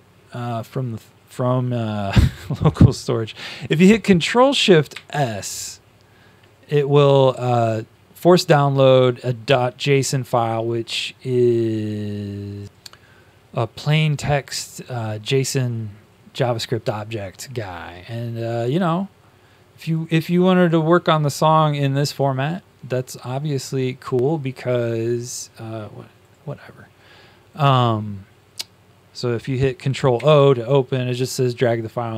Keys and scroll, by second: 4.8 ctrl+shift+s, 30.1 ctrl+o.